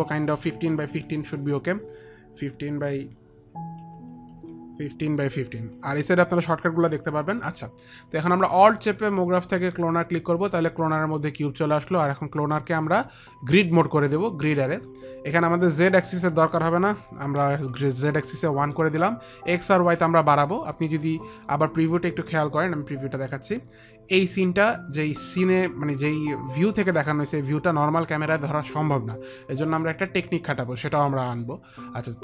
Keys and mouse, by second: 0.6 click, 1.4 KP_1, 1.6 KP_5, 2.8 Tab, 2.8 click, 2.8 KP_5, 2.8 KP_1, 8.5 KP_1, 10.5 alt+click, 14.5 alt+click, 16.6 click, 17.8 click, 17.8 KP_1, 18.9 Return, 20.9 Return, 20.9 KP_1, 22.9 click, 31.0 click.